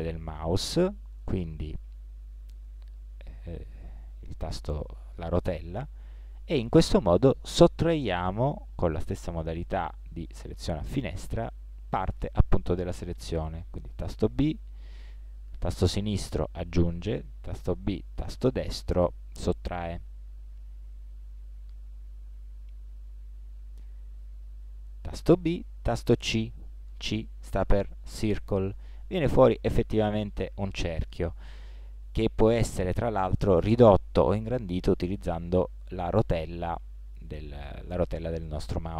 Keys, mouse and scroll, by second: 14.3 b, 17.6 b, 23.7 a, 26.9 c.